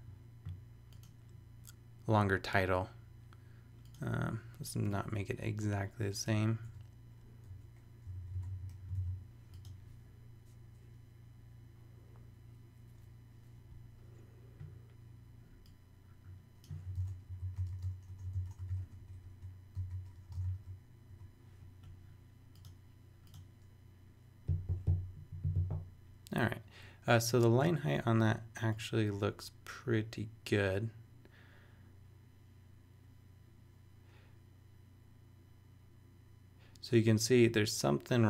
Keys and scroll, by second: 6.6 BackSpace, 8.0 typing, 8.5 super+., 8.9 super+s, 16.7-21.1 typing.